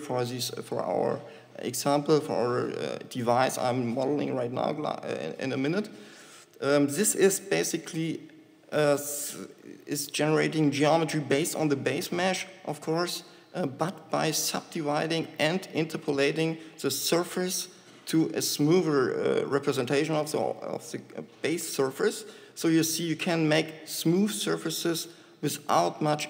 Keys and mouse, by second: 15.4-17.3 drag, 17.3-19.9 middle drag, 26.1-26.2 shift+drag.